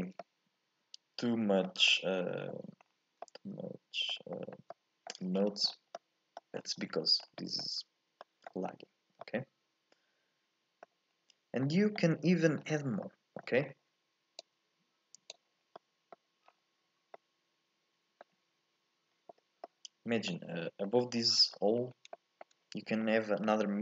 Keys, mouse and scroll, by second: 0.2-2.0 middle drag, 2.0-3.0 scroll up 2, 3.0-3.3 scroll down 2, 3.3-4.7 middle drag, 4.7-5.5 scroll up 1, 5.5-9.5 scroll down 9, 9.5-11.2 middle drag, 11.2-11.7 scroll up 1, 11.7-14.6 middle drag, 14.6 click, 17.2-20.7 middle drag, 20.7 scroll down 2, 20.9 middle click, 21.8 scroll up 2, 22.3 shift+middle click, 23.2-23.8 scroll up 3.